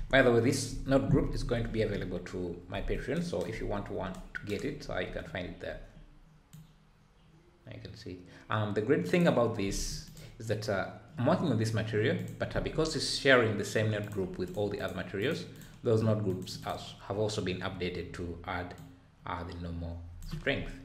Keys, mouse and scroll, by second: 1.4 n, 2.0 scroll up 5, 2.4-2.8 scroll down 2, 2.8 ctrl+s, 3.6 `, 6.6-14.1 drag, 14.8 click, 15.5 click, 16.6 click, 18.8-20.5 drag, 20.5 `.